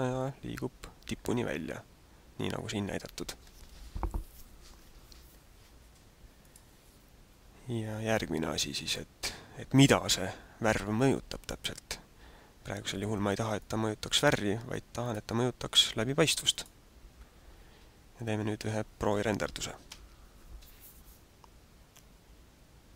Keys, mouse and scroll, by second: 6.6 click, 8.0 click, 11.0 click, 13.5 click, 15.0 click, 16.5 click.